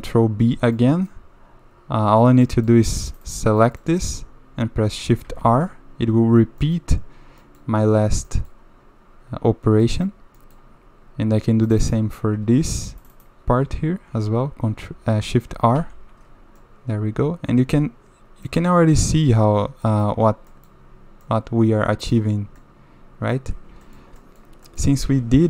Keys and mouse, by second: 0.0 middle click, 0.8 middle click, 2.4 middle click, 3.1 click, 3.2 click, 3.6 middle click, 5.3 shift+r, 6.6 click, 7.4 click, 8.3 click, 9.8 click, 10.4 click, 11.7 click, 11.8 click, 13.0 shift+click, 13.1 shift+click, 15.8 shift+r, 16.6-18.5 middle drag, 19.9 middle click, 20.5 middle click, 21.2 middle click, 22.6 middle click, 23.9 shift+middle click, 24.2 middle click, 24.7 middle click, 24.9 a, 25.1 a.